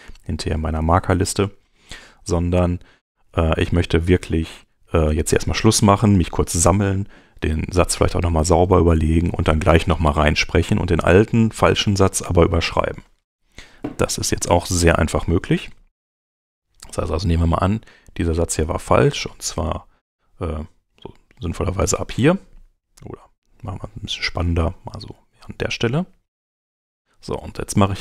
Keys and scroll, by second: 24.8 Right.